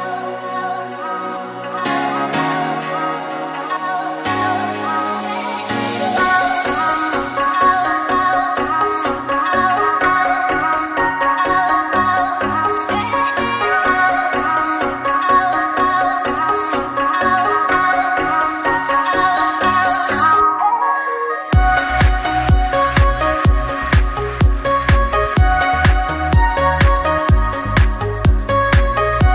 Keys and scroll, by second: 12.9 Delete.